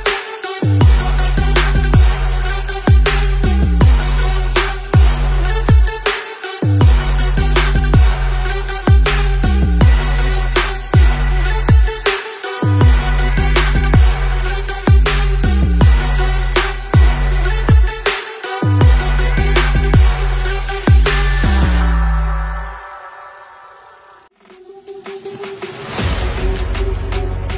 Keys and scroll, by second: 1.9 ctrl+z, 4.3 ctrl+z, 9.6 v, 9.7 Left, 9.9 Left, 10.4 space, 11.4 space, 11.6 space, 13.8 ctrl+z, 14.6 v, 17.0 space, 17.1 space, 17.4 space, 18.8 space, 19.4 ctrl+0, 20.4 alt+Tab, 20.4 shift+p, 21.8 Return, 22.5-23.4 typing, 24.6 z, 24.8 space, 25.0 v.